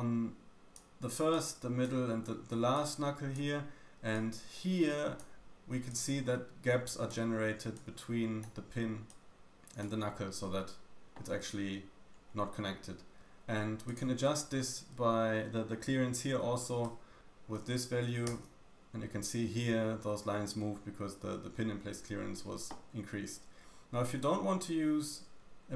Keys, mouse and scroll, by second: 0.8-4.0 typing, 1.3 click, 2.7 click, 4.1 click, 5.2-5.8 d, 5.8 click, 7.1-11.3 typing, 8.4 click, 9.0 click, 14.0-25.7 drag.